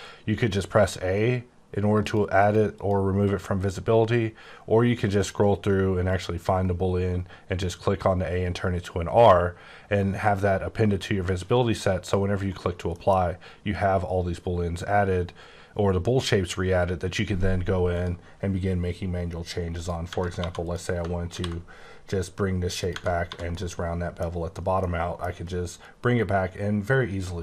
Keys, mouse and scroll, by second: 2.0 click, 2.4 click, 3.2 click, 5.2 click, 6.5 click, 12.0 click, 12.9 middle click, 17.9 click, 18.4 scroll up 2, 19.7 click, 20.1 Tab, 20.4 2, 20.6 click, 21.3 ctrl+b, 22.0-22.5 scroll up 5, 22.8 click, 22.9 Tab, 23.1 1, 23.5 middle click, 24.8 middle click.